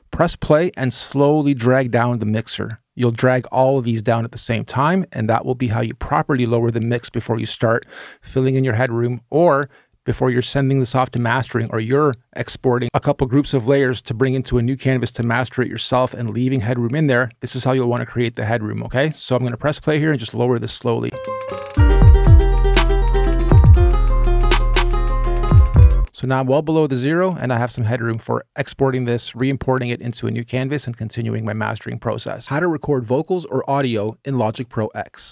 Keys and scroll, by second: 20.9 space, 25.7 space.